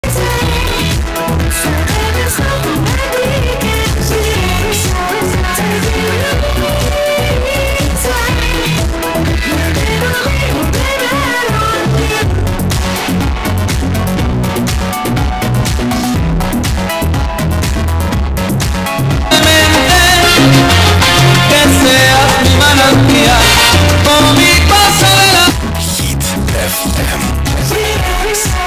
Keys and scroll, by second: 0.1 ctrl+q, 1.6 m, 1.9 Down, 2.5-3.9 Down, 4.6 Down, 5.3 Down, 5.6 Down, 26.3 Page_Down.